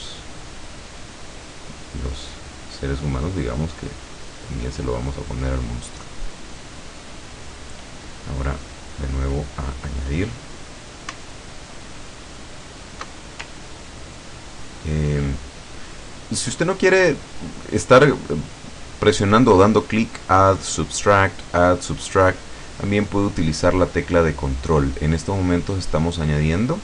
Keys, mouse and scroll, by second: 0.2 click, 0.9 click, 1.7 click, 2.4 click, 3.2 click, 3.9 click, 4.7 click, 8.9 click, 12.4 alt+click, 13.5-15.4 ctrl+alt+drag, 24.1-24.5 scroll up 1, 24.6-24.9 scroll down 1.